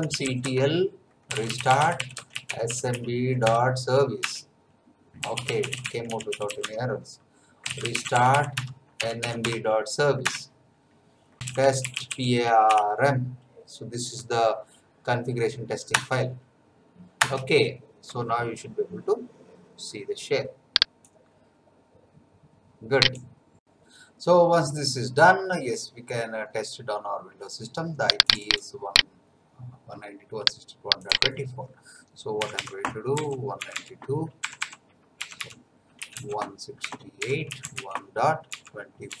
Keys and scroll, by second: 0.0-3.4 typing, 3.4 Tab, 4.2 Return, 4.9-9.2 typing, 9.4 Tab, 10.2 Return, 11.1-12.7 typing, 15.9 Return, 32.4-39.2 typing.